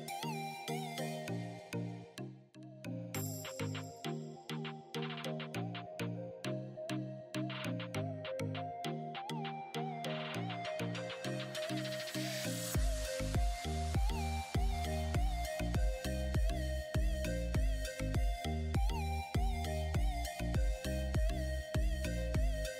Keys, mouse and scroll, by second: 0.9 click, 1.8 scroll down 1, 3.4 space, 3.6 click, 3.8 space, 6.5-9.0 drag, 9.0 ctrl+g, 9.7 click, 14.4-17.1 shift+drag, 18.7 space, 19.2 click, 20.7-21.2 scroll up 1, 21.7 alt+click, 22.6 scroll down 1.